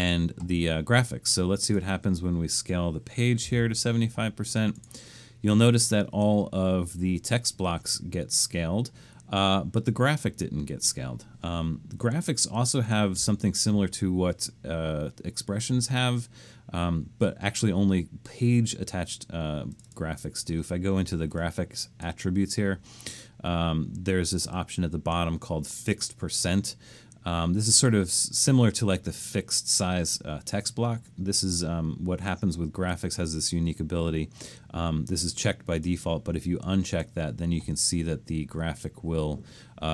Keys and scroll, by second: 3.2-4.0 typing.